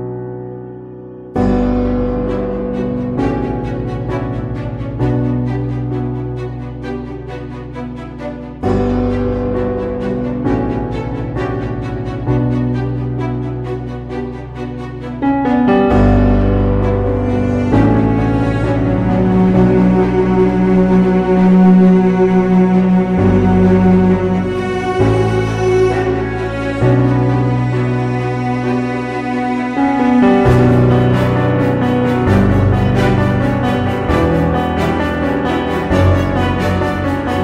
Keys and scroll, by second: 1.9-3.2 typing, 4.6 [, 15.6 ctrl+0, 21.6 ctrl+t, 26.9 ctrl+t, 28.6 ctrl+t, 31.7 b, 34.3 space, 34.8 space, 35.9 ctrl+d, 37.3 ctrl+g.